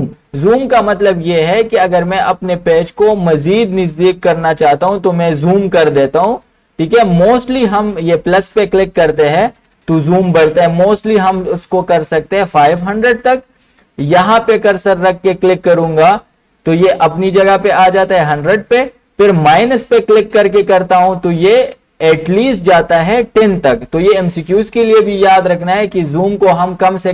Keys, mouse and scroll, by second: 4.7 click, 4.7 typing, 6.1 typing, 8.6-15.3 drag, 18.3-22.4 drag, 26.1 click.